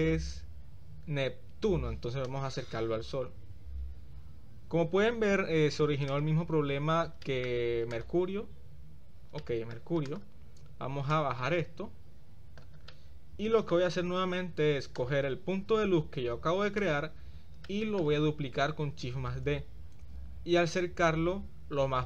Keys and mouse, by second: 0.0 click, 2.2-5.2 drag, 4.1 middle click, 4.7 middle click, 6.1 click, 7.2-7.5 shift+middle drag, 7.9 click, 9.4 shift+middle click, 10.1 drag, 11.1-12.7 drag, 12.9-13.8 middle drag, 14.9 click, 16.8 click, 17.7-18.0 shift+middle drag, 19.5 shift+d.